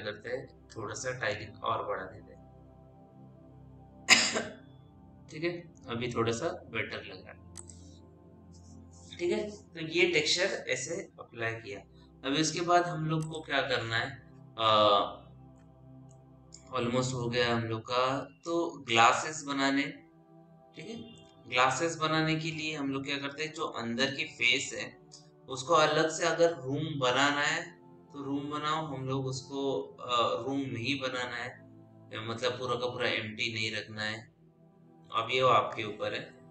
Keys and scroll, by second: 1.5 KP_6, 1.9 Return.